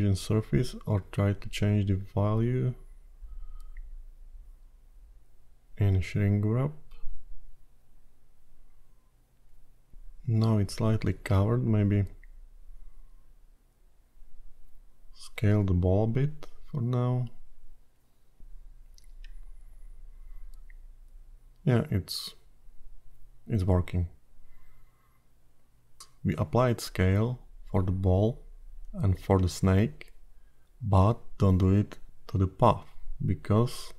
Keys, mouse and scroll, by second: 3.7 click, 7.2 click, 8.1-9.5 scroll down 3, 9.5 click, 11.4 middle click, 14.1 click, 18.8 click, 20.2 r, 21.8 middle click, 25.3 scroll down 2, 27.7 click, 28.6 Tab, 29.9 Tab, 30.4 q, 32.6-33.1 scroll down 10, 33.5 middle click.